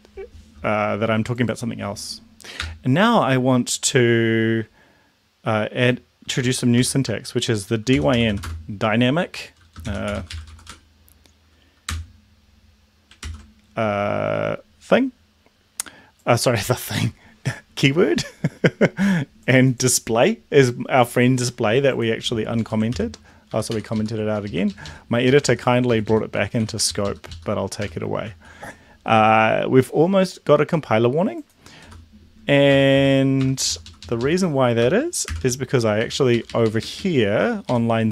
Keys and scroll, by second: 2.6 BackSpace, 6.7-11.2 typing, 11.9 Return, 13.2 ctrl+s, 22.6 Up, 22.9 ctrl+/, 23.4 Up, 23.6 End, 23.9 Left, 24.4 ctrl+shift+Left, 24.7 ctrl+shift+Left, 25.2 shift+Left, 25.8 shift+Left, 26.3 Delete, 26.5 Delete, 26.9 ctrl+Left, 27.8 BackSpace, 28.2 ctrl+s, 31.9-33.3 typing, 33.6 ctrl+Left, 35.2 shift+7, 36.1 Up, 36.3 Right, 36.4 Right, 36.6 Right, 36.8 Right, 37.0 Right, 37.7 shift+Right.